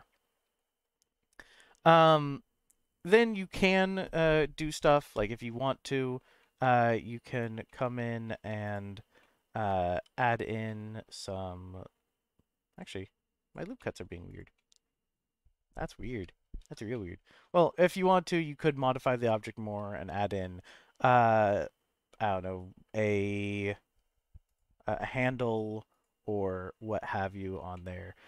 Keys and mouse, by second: 5.0 ctrl+r, 7.6 middle click, 8.3 2, 9.2 middle click, 9.9 ctrl+r, 13.8 middle click, 14.3 click, 14.5-15.7 middle drag, 16.6 ctrl+z, 16.9 middle click, 18.6 middle click, 24.4 click, 25.9 click, 27.7 middle click.